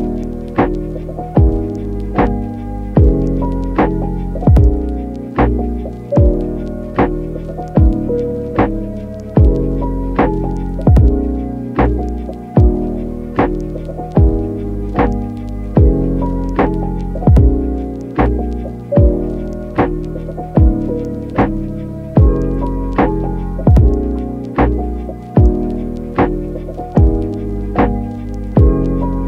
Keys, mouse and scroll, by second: 1.2 click, 1.6 shift+middle click, 2.8 middle click, 7.5 click, 9.1 KP_0, 9.7 n, 10.6 click, 11.1 click, 11.4 n, 13.2 n, 13.6 click, 13.7 n, 15.6 n, 16.1 click, 16.4 n, 17.6 click, 18.3 click, 18.6 KP_0, 18.7 KP_0, 19.3 click, 20.9 click, 23.2 click, 26.4 n, 26.8 click, 27.0 n, 27.3 n, 27.6 click, 27.7 n, 28.1 middle click.